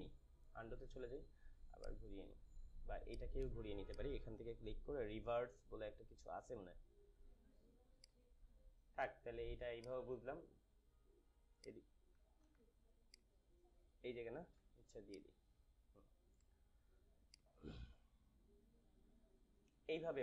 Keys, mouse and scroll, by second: 0.3 click, 0.5 ctrl+z, 1.8 click, 7.9-12.5 drag, 12.3 z, 13.3 click, 14.5 ctrl+z, 15.0-20.2 drag, 17.5-20.1 drag.